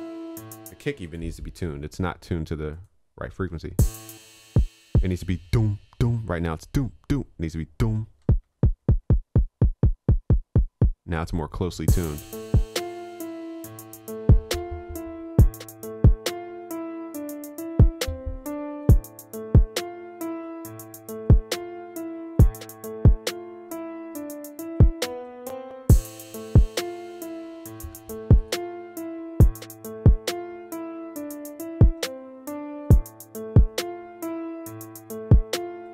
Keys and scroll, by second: 27.9 ctrl+s, 32.0 ctrl+s.